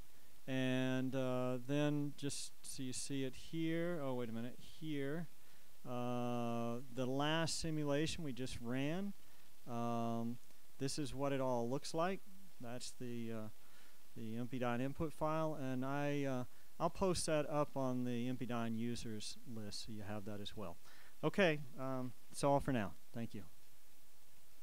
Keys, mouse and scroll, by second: 0.3 Escape, 8.8 click, 10.2 click, 11.4-11.8 scroll up 1, 11.8-12.3 scroll down 1, 12.5-12.9 scroll down 1, 13.1-13.9 scroll down 1, 14.1 scroll down 1, 16.2-16.6 scroll up 1, 17.0-17.4 scroll up 1, 17.7-24.5 scroll up 2.